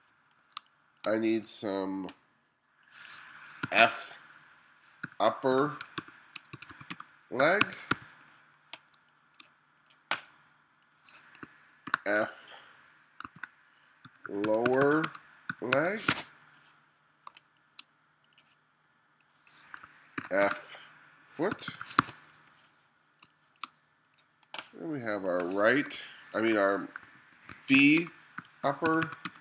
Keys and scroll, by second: 0.0-0.6 typing, 3.7 f, 3.8 space, 5.1-8.0 typing, 9.0 space, 11.9 shift+f, 13.4-16.1 typing, 17.3 space, 20.2-23.3 typing, 27.8-29.4 typing.